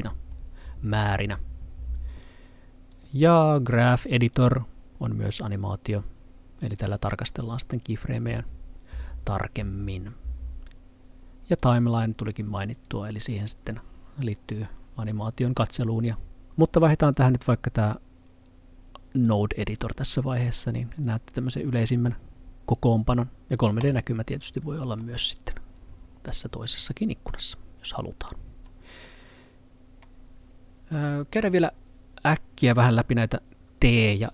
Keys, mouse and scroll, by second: 3.0 click, 11.6 click, 17.0 click, 19.4 click, 23.4 click, 25.0 middle click, 28.0 click, 29.1 middle click.